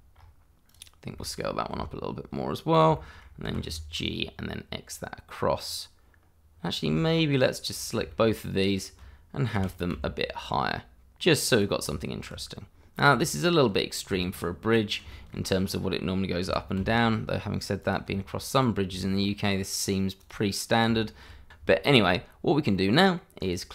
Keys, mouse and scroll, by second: 0.7 click, 1.1 shift+middle click, 1.7 s, 2.7 click, 3.0 middle click, 3.3 shift+middle click, 3.4 g, 3.6 y, 4.0 x, 5.6 click, 6.6 scroll down 1, 7.0 shift+middle click, 7.8 scroll down 1, 8.1 shift+middle click, 8.4 shift+click, 8.4 click, 9.5 g, 9.9 z, 11.5 click, 11.7-12.0 scroll down 1, 12.0 middle click, 12.7-13.1 scroll up 1, 13.1 Tab, 14.7 click, 15.1 middle click, 15.5 shift+middle click, 15.6-16.4 scroll up 1, 16.4 g, 16.8 z, 17.5 click, 17.7 Tab, 18.1 scroll down 1, 18.6-18.9 scroll up 1, 18.9 click, 19.4 shift+middle click, 21.2 scroll down 1, 21.4 shift+middle click, 21.9 scroll up 1, 22.1 middle click, 22.7 shift+z, 23.0 middle click, 23.2 scroll up 1, 23.4 shift+middle click.